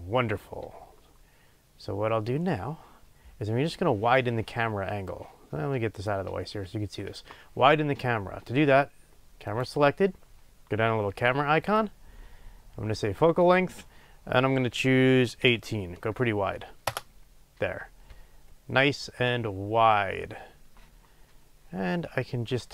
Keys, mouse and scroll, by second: 9.4 click, 11.5 click, 13.3-22.7 drag, 16.9 Return.